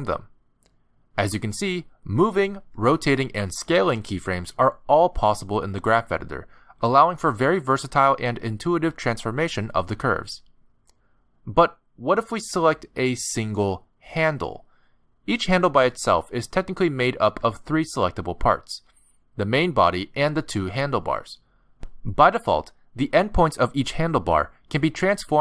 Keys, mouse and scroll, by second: 2.2 r, 4.0 s, 9.6 r, 13.8 click, 17.3 click, 18.5 click, 19.4 click, 20.5 click, 21.5 click, 22.6 click, 23.6 click, 25.0 g.